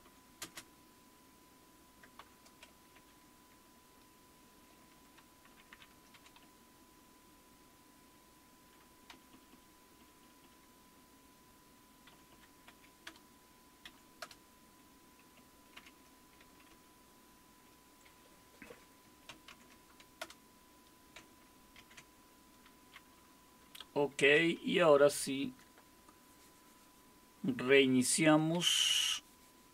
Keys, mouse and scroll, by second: 0.0-0.9 typing, 2.2 shift+7, 2.9 Up, 5.5 ctrl+k, 5.7 ctrl+k, 6.4 Up, 7.1 Up, 7.2 Up, 9.1 Down, 9.3 Down, 9.5 Down, 10.4 Down, 12.1 Up, 12.3 Up, 13.1 Return, 13.9 Up, 14.2 Return, 15.8 ctrl+u, 16.7 Delete, 19.5 ctrl+o, 20.2 Return, 21.8 ctrl+x, 28.5 alt+super+r.